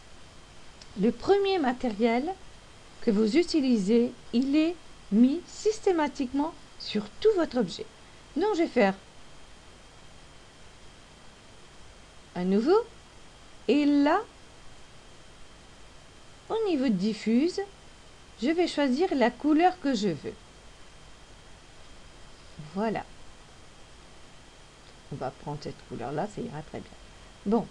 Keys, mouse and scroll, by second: 9.8 click, 14.7 click, 17.8 click.